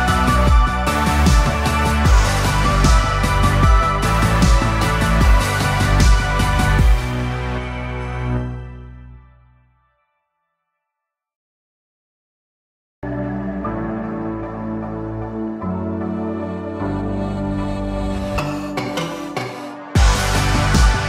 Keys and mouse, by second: 0.0 g, 2.9 a, 3.8 a, 4.8 a, 5.5 click, 6.0 a, 7.2 c, 10.7 KP_3, 11.9 ctrl+KP_3, 13.4 c, 15.6 g, 18.1 a, 18.3 a, 19.3 c.